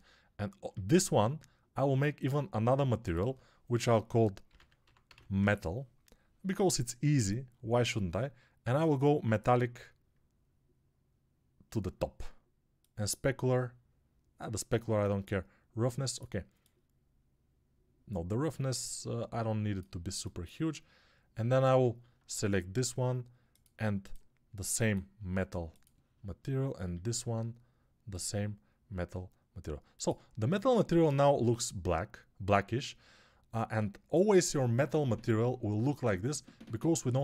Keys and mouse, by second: 0.7 alt+q, 20.0-26.0 alt+shift+drag, 20.0-26.0 alt+shift+middle drag, 20.0-37.2 alt+shift+right drag, 21.8 alt+q, 26.9 alt+q, 29.8-37.2 drag.